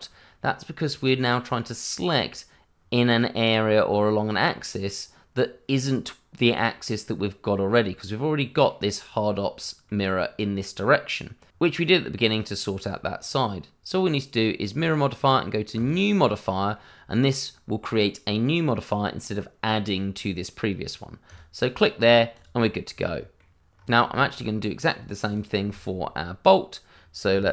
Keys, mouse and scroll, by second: 0.1 middle click, 5.6 middle click, 8.4 middle click, 14.7 click, 21.2 click, 22.0 scroll down 1, 22.3 click, 22.6 middle click, 23.7-24.1 scroll up 1, 24.1 shift+middle click, 24.4 middle click, 25.2 click, 25.7 shift+middle click, 25.7 middle click, 25.9-26.4 scroll up 1, 27.0-27.5 scroll down 1.